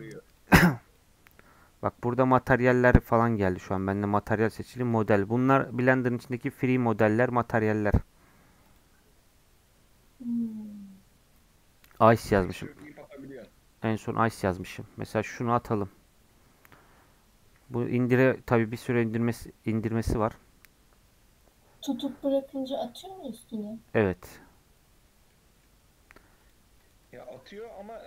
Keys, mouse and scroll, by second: 3.8-6.8 drag, 6.9-14.9 drag, 24.6-25.0 scroll up 4, 25.3-28.0 middle drag.